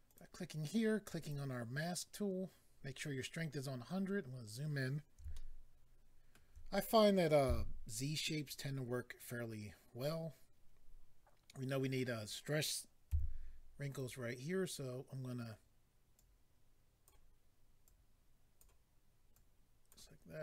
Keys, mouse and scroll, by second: 0.1 click, 0.2 click, 1.2 click, 1.3 click, 4.1 scroll up 2, 5.3 shift+middle click, 7.4 f, 8.3 click, 8.5 click, 13.9 click, 13.9 f, 14.0 click, 16.1 click, 17.8 click, 19.3 click.